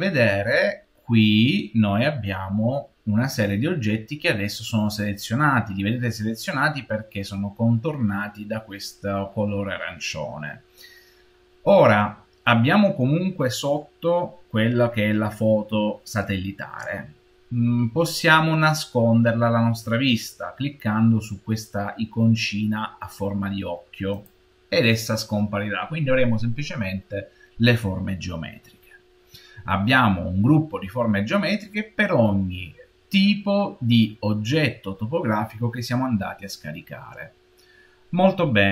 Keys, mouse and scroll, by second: 24.0 click.